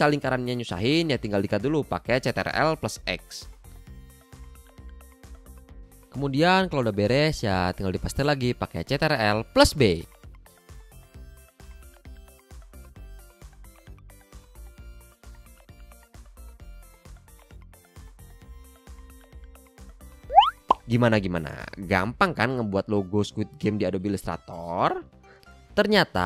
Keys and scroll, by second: 0.0 a, 6.7 super+b, 7.9 v, 8.8 a, 21.3 a, 23.4 i, 24.3 v, 24.9 a.